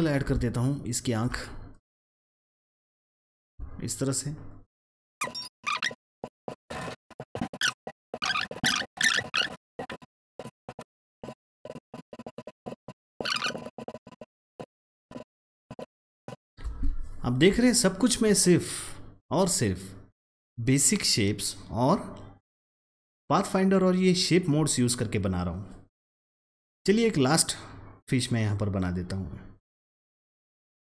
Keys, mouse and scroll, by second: 0.4-2.7 alt+shift+drag, 3.3 click, 3.6-4.2 alt+scroll down 1, 4.9 alt+scroll up 1, 5.1 click, 6.3 click, 6.7 double click, 6.7 click, 6.8 ctrl+x, 7.0-8.3 drag, 8.3-9.6 drag, 9.8 click, 9.9 ctrl+z, 9.9 click, 10.8 click, 11.1 double click, 11.7 click, 11.8 alt+scroll up 1, 11.9 alt+click, 12.4-13.0 alt+scroll down 2, 12.6 double click, 13.0 click, 13.1 alt+scroll up 1, 13.3 double click, 13.8 alt+shift+click, 14.0 double click, 14.1-14.6 alt+scroll up 2, 14.2 click, 14.6 click, 15.1 alt+scroll down 1, 15.2 click, 16.3 click, 16.5-16.9 alt+scroll up 2, 17.3-18.8 alt+scroll up 1, 20.7-24.5 drag, 24.5-25.5 scroll down 1, 26.8-27.2 scroll up 1, 28.3-29.9 drag, 29.4 click, 29.9 Up, 30.0 ctrl+z, 30.2 click, 30.5 Down.